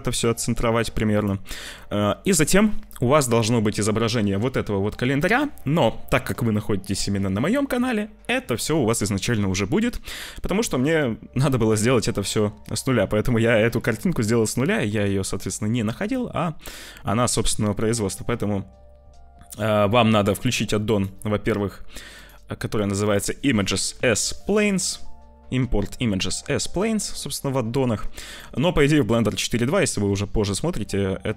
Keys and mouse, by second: 15.8 shift+a, 20.0 click.